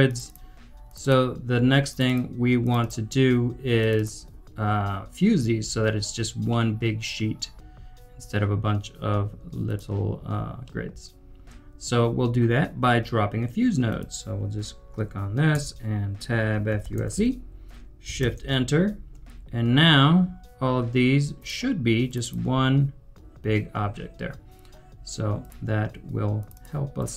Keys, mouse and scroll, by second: 6.4 double click, 6.5 middle click, 7.1-8.3 scroll down 1, 10.1 scroll down 1, 10.6 middle click, 11.3 scroll down 1, 15.5 Tab, 16.5-17.6 typing, 18.2 shift+Return, 22.2 double click, 26.5 double click.